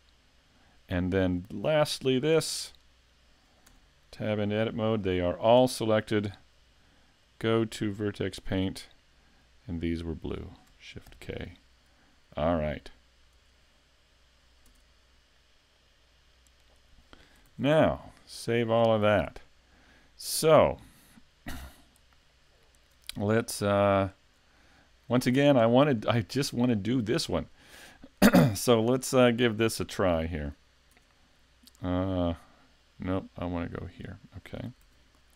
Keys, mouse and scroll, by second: 0.9 click, 1.6 shift+middle click, 2.8 right click, 3.7 Tab, 5.0 shift+middle click, 7.2 click, 9.6 click, 11.1 shift+k, 13.3 Tab, 14.6 Tab, 15.7 click, 17.9 super+s, 18.4 shift+middle click, 19.0 a, 19.4 middle click, 21.8 click, 22.3 scroll down 2, 22.8 shift+middle click, 23.9 click, 24.5 shift+middle click, 25.2 scroll down 1, 25.7 shift+middle click, 26.1 middle click, 28.2 right click, 28.7 shift+middle click, 30.9 Tab, 33.1 click, 33.8 Tab, 33.8 click, 34.8 s.